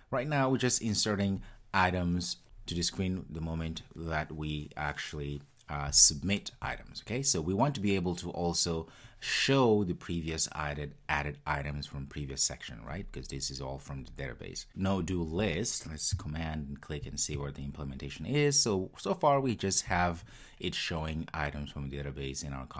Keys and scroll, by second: 17.5 super+b.